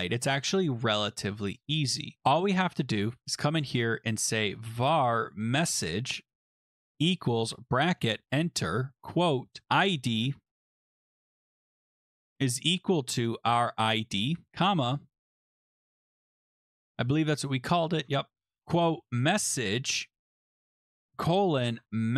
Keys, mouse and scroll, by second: 3.0 click, 3.2 Return, 4.1-14.3 typing, 15.2 Return, 15.5-16.1 BackSpace, 16.2 Return, 16.6-17.5 scroll, 17.7-18.6 scroll, 18.3-22.1 typing, 19.0 click, 20.3 Right, 20.7 Left.